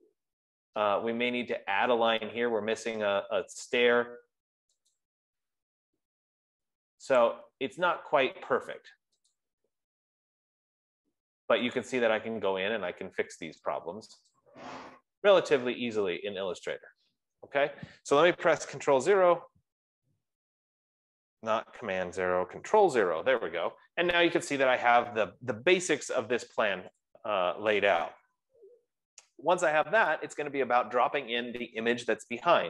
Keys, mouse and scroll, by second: 5.4 click, 6.2 BackSpace, 7.6 click, 8.4 BackSpace, 9.8 click, 12.3 click, 14.7 click, 18.1 BackSpace, 19.5 super+0, 23.1 super+0, 24.8 F15, 27.5 click.